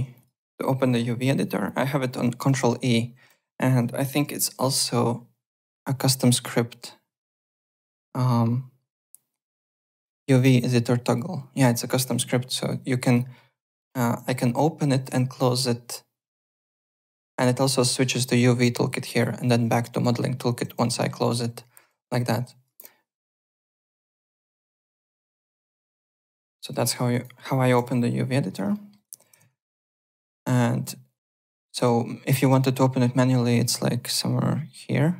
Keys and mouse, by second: 0.1 click, 2.6 ctrl+e, 3.3 ctrl+e, 4.2 Home, 5.5 click, 10.3 click, 11.0 click, 12.6 click, 13.7 click, 14.1 ctrl+e, 15.0 ctrl+e, 16.2 ctrl+e, 16.8 ctrl+e, 20.0 ctrl+e, 20.7 ctrl+e, 21.4 ctrl+e, 22.6 ctrl+e, 24.7 ctrl+e, 25.7 ctrl+e, 26.1 click, 26.4-27.7 typing, 26.8 click, 28.7 alt+middle click, 28.9 alt+right click, 29.4 alt+Tab, 30.4 alt+click, 31.1 e, 32.4 click.